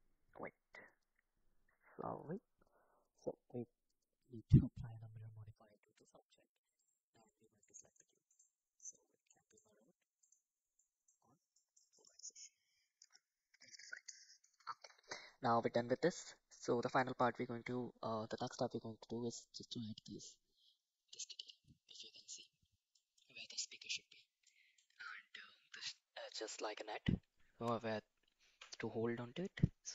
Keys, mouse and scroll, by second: 0.5 middle click, 2.3 click, 3.0 click, 4.0 click, 4.3-6.9 drag, 7.6 click, 8.8 middle click, 10.2 click, 10.8 middle drag, 11.5 middle drag, 12.0 click, 12.4-13.7 middle drag, 14.2 middle click, 14.7 shift+middle drag, 15.2-15.7 middle drag, 16.3 middle click, 17.3 middle click, 22.9 middle click, 24.5 middle drag.